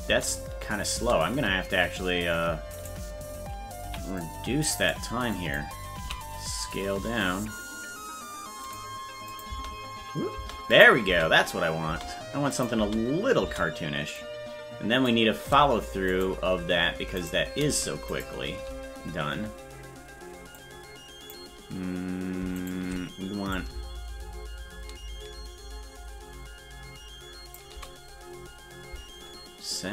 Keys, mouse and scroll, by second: 0.1 space, 1.4 space, 2.8 right click, 3.8 c, 5.4 click, 6.0 s, 9.3 click, 9.5 space, 10.7 click, 10.7 space, 11.1 space, 12.5 click, 12.5 space, 14.2 click, 16.2-17.7 right drag, 18.2 shift+right click, 20.5 click, 22.7 shift+right click, 23.5-27.5 shift+drag.